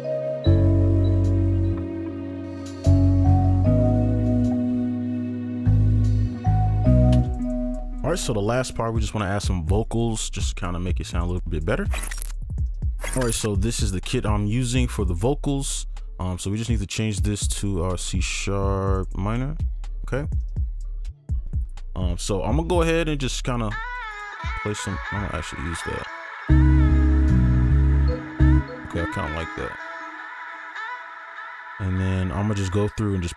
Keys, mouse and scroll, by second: 3.9 ctrl+click, 5.4-7.2 alt+scroll down 1, 7.2 right click, 26.3 right click, 28.1 space, 28.5 space, 31.1 right click.